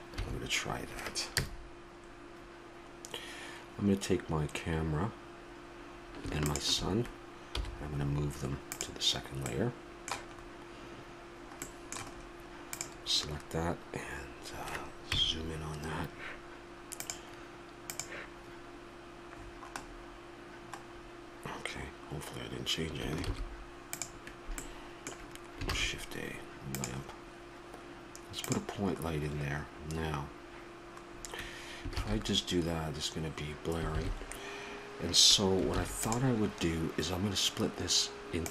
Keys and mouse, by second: 0.0 Escape, 1.2 KP_0, 6.3-8.5 drag, 7.3 m, 9.3-12.5 middle drag, 12.5-14.5 right drag, 14.9 KP_Decimal, 16.8-18.7 drag, 19.1-23.1 middle drag, 23.1 shift+s, 28.4 shift+a, 32.1 shift+z, 34.1 shift+z, 35.6 ctrl+s.